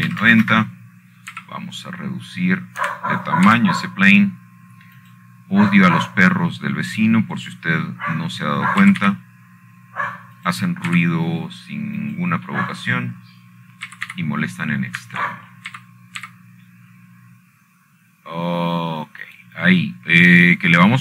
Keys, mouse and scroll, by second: 1.5 r, 2.6 y, 2.8 KP_9, 3.0 KP_0, 3.2 Return, 4.0 s, 5.5 Escape, 6.2 s, 7.7 click, 11.5 g, 11.7 y, 13.1 click, 13.6 s, 14.7 click, 15.2 click, 15.9 middle click, 16.6 g, 16.8 y, 17.7 Escape, 18.4 g, 18.9 x.